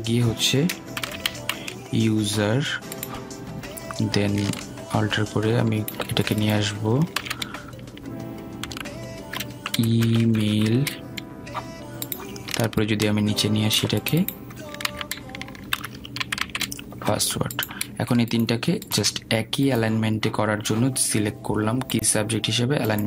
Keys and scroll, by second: 9.6 ctrl+a, 17.3 ctrl+a.